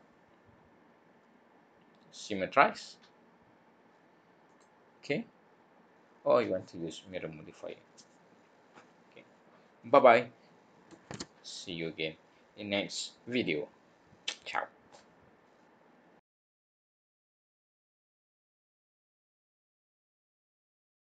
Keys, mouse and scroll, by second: 4.4 click.